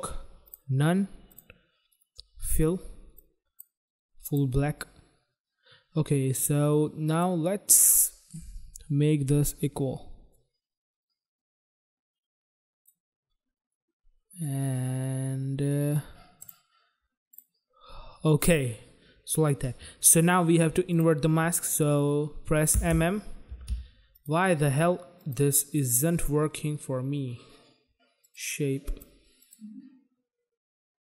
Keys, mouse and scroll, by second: 0.4 click, 1.2 click, 2.4 click, 3.1 click, 4.2 click, 4.3 click, 7.0 click, 10.1 click, 14.4 click, 16.3 click, 17.3 click, 20.8 click, 22.7 m, 22.8 m, 23.4 m, 23.6 m, 24.1 click, 25.1 click, 28.2 click, 28.8 click, 29.3 click.